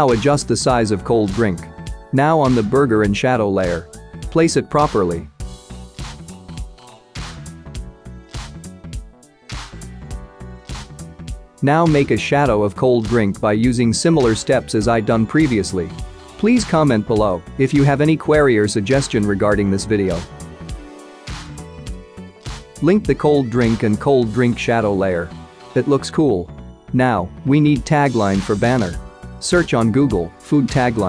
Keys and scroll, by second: 3.5 ctrl+t, 12.9-13.4 typing, 13.7 Return.